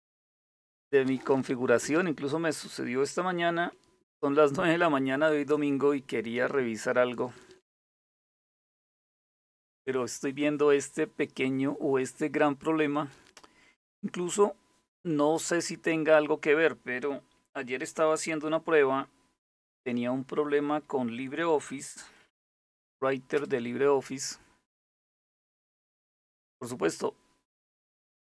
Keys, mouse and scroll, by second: 19.1 alt+super+d, 21.4-22.6 typing, 23.0 Return.